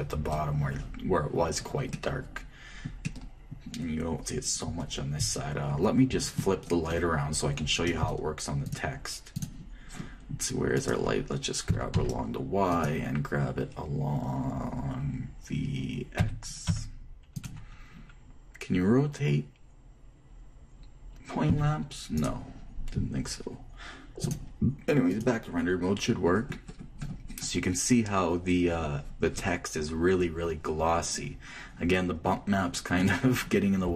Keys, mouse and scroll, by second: 2.6-6.9 middle drag, 9.3-11.3 drag, 11.3 middle click, 11.5-13.4 right drag, 12.4 g, 16.9 g, 22.2 r, 24.9-26.7 drag, 28.5-30.1 middle drag, 30.2 middle click, 33.8-33.9 right drag.